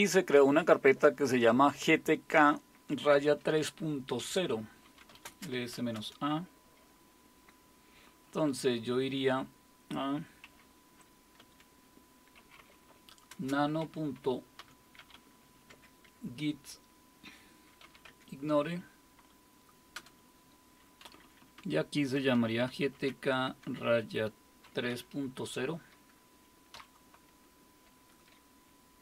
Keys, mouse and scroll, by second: 4.7-6.2 typing, 10.4-15.6 typing, 15.7 Tab, 17.6-18.3 typing, 19.9 Return, 21.0 Down, 21.2 Down, 21.4 Down, 21.6 Down, 22.1-23.6 typing, 24.6 typing, 26.7 typing.